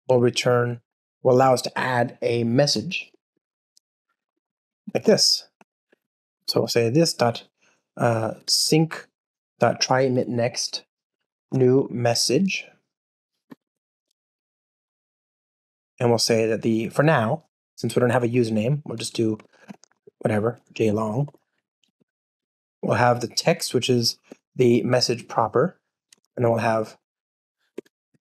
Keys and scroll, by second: 0.8 Return, 8.3 Return, 16.8 super+p, 19.4 alt+BackSpace, 24.9 Return, 28.1 super+z.